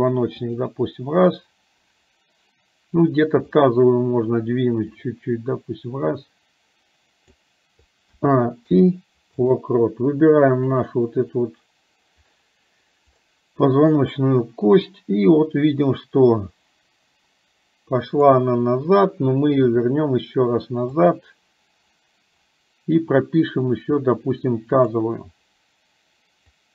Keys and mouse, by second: 5.3-7.5 drag, 10.9 click, 15.0-18.5 drag, 24.9 click.